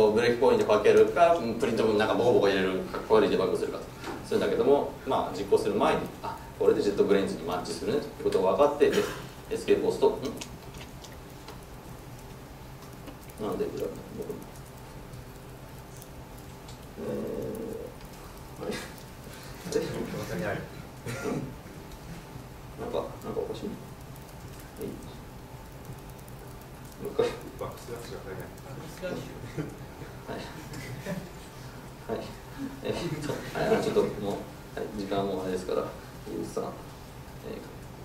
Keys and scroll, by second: 19.7 alt+Return, 29.5 alt+Return.